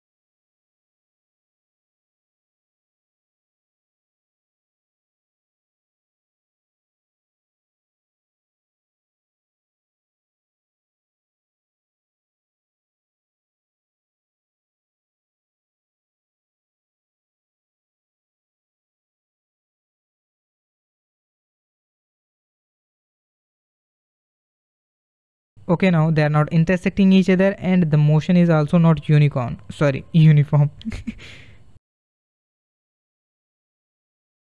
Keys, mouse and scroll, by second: 0.8-2.0 drag, 2.0 space, 3.8 space, 5.5 click, 5.9 click, 12.5 click, 15.8 click, 19.9 click, 20.4 click, 20.9 click, 24.2-24.7 drag, 24.7 space, 29.7-32.9 drag, 33.9 click.